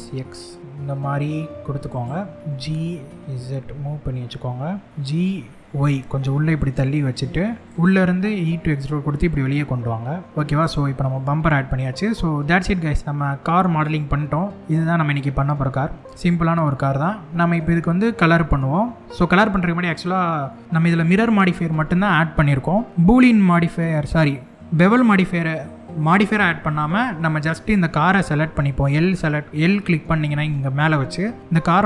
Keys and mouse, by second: 1.5 click, 2.4 g, 2.8 z, 4.9 g, 5.6 y, 7.9 e, 10.7 middle click, 12.8 middle click, 13.9 middle click, 14.6 shift+middle click, 17.2-19.0 middle drag, 19.6 middle click, 22.9 middle click.